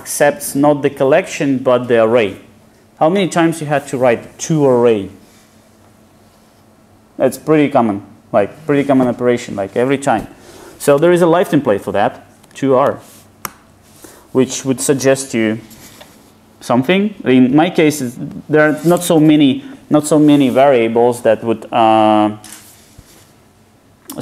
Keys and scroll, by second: 13.5 Return.